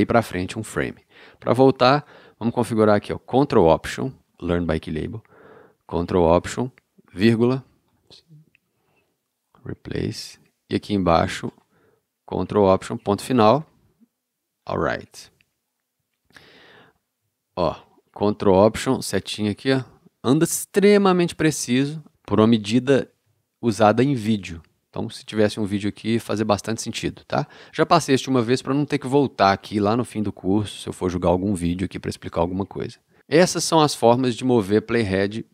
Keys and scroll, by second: 7.1 ctrl+alt+,, 13.0 ctrl+alt+., 19.2 ctrl+alt+., 23.7 ctrl+alt+,.